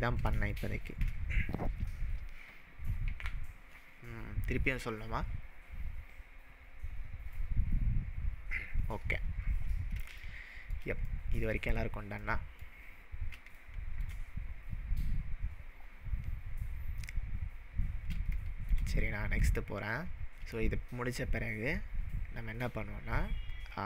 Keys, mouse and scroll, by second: 0.7-1.1 shift+middle drag, 10.3-10.8 shift+middle drag, 13.0-13.3 scroll up 2, 13.6-14.1 shift+middle drag, 18.3-18.9 shift+middle drag.